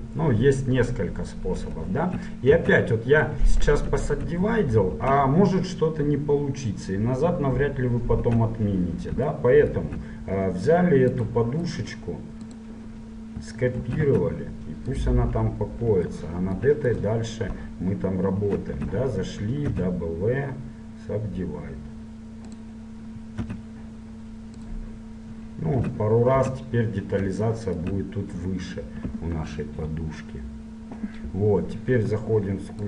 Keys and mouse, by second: 2.8 Tab, 3.8 ctrl+z, 4.1 ctrl+z, 4.5 ctrl+z, 8.3 Tab, 11.3 click, 12.6-13.6 drag, 13.9 shift+d, 17.0 right click, 17.8 click, 18.7 right click, 19.1 Tab, 19.8 w, 23.6 w, 25.8 Tab, 26.0 Tab, 26.6 Tab, 30.6-32.2 middle drag.